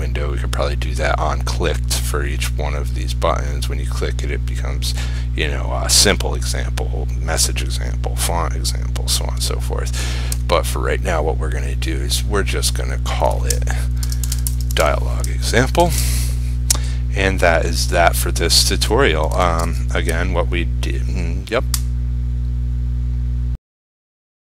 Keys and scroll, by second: 16.0 ctrl+s.